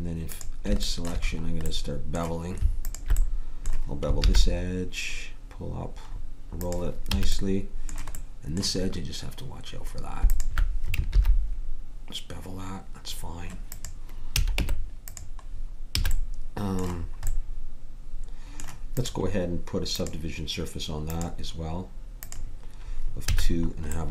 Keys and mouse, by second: 4.2 ctrl+b, 7.1 a, 11.1 ctrl+b, 14.3 a, 14.6 Tab, 15.9 a, 23.2 a.